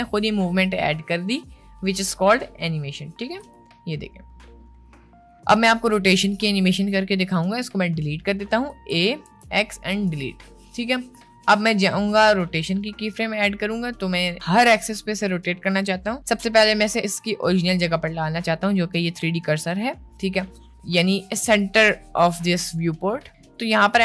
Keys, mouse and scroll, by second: 3.5 space, 5.7 space, 8.7 a, 9.2 x, 18.1-19.6 drag, 21.2-21.7 drag, 22.6 middle click.